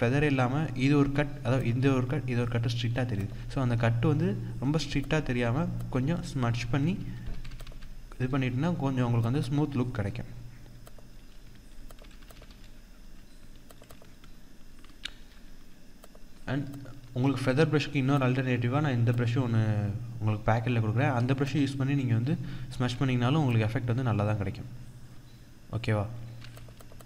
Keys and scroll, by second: 1.8 ctrl+=, 6.7 ctrl+-, 11.2 ctrl+-, 12.5 ctrl+-, 15.0 ctrl+=.